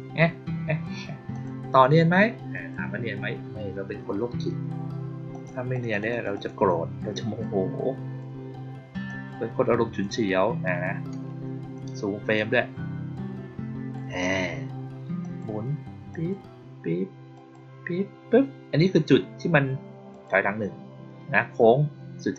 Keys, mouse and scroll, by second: 1.2 click, 2.4 click, 5.2 click, 5.6 click, 5.8 click, 6.0 click, 6.2 click, 7.3-8.1 drag, 9.0-9.9 drag, 12.3-13.9 drag, 15.1 click, 16.0 click, 17.2 click, 20.0 click, 22.2 click.